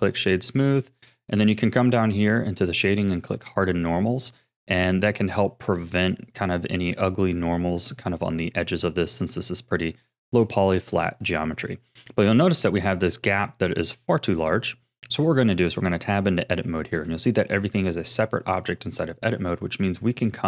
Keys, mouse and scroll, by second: 0.4-2.3 middle drag, 2.3-3.3 drag, 4.5-9.5 middle drag, 9.5-10.1 scroll down 4, 10.1-12.0 shift+middle drag, 12.0-12.8 scroll up 7, 12.8-13.4 middle drag, 14.0-14.8 scroll down 6, 14.8 middle click, 15.7 Tab, 16.6-19.6 shift+middle drag.